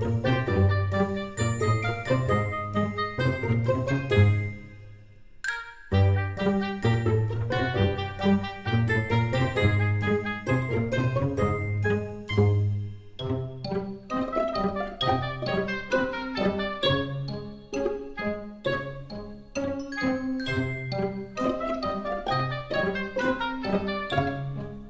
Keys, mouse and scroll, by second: 1.5 click, 8.0 s, 15.6 Tab, 16.5 click, 16.7 click, 20.8 g.